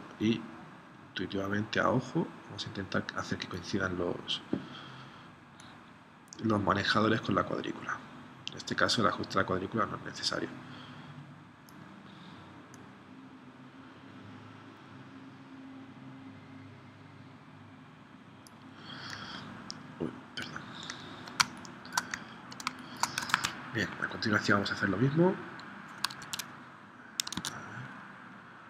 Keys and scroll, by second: 21.4 space, 22.7 space, 23.3 super+Tab, 26.2 super+Tab, 27.4 super+Tab.